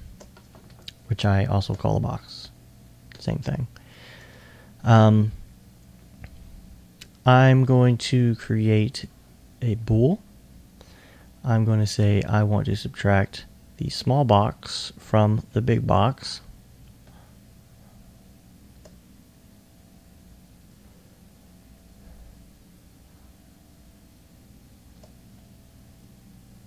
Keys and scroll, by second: 0.7 alt+s, 0.8 1.